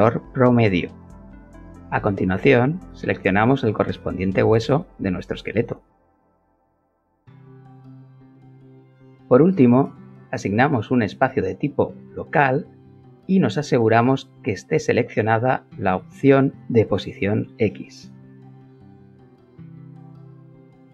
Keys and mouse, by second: 0.6 click, 2.5 click, 4.0 click, 5.9 click, 7.6 click, 9.4 alt+middle click, 13.9-20.3 alt+middle drag, 20.3 click.